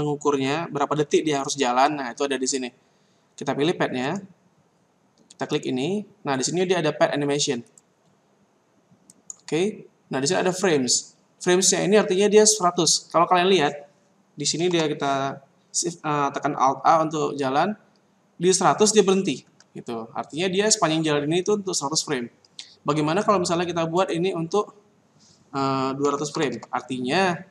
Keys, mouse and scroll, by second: 4.0 right click, 5.5 click, 5.6 click, 6.4-7.0 scroll down 2, 7.6 click, 7.7 click, 8.2-8.6 scroll down 1, 9.0 click, 9.8-10.8 scroll down 1, 14.5 alt+a, 19.4 Escape, 24.0 click, 26.5 KP_0.